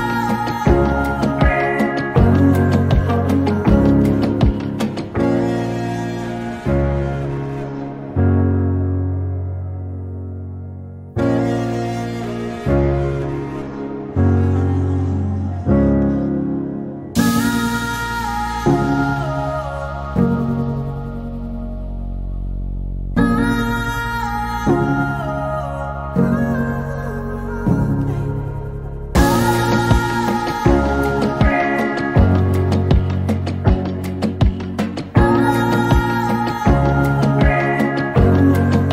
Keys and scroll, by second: 2.1 Delete, 2.3 Delete.